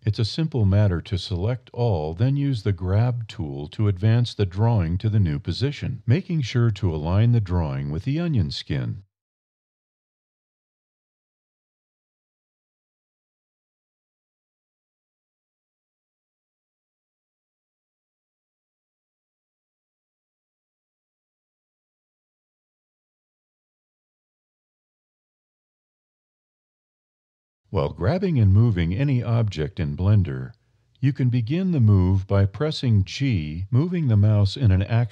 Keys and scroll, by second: 0.2 a, 0.5 g, 4.5 Up, 5.0 a, 5.7 g, 8.1 Up, 8.5 a, 9.0 g, 12.5 Up, 12.8 a, 13.3 g, 15.9 Up, 16.3 a, 16.9 g, 19.4 Up, 19.7 a, 20.0 g, 22.4 Up, 22.6 a, 24.4 g, 32.6 Up, 32.7 a, 33.1 g.